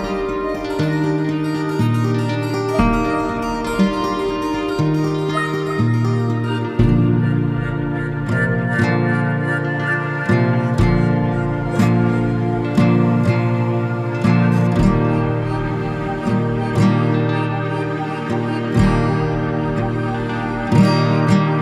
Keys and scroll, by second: 16.5 ctrl+c.